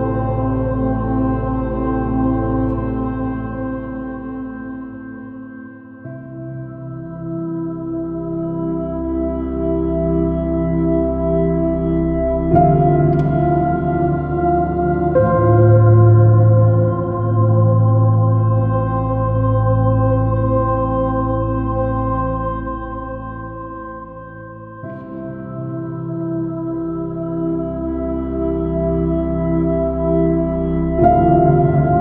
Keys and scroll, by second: 4.3 space, 11.7 space, 23.0 space, 26.9 space, 28.3 space, 31.3 b.